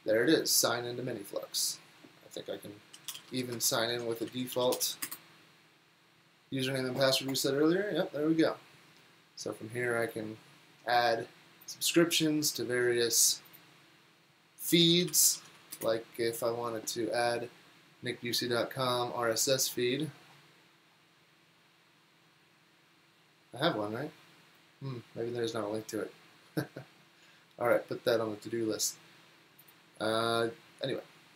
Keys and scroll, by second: 2.8-3.8 typing, 14.9-16.0 typing.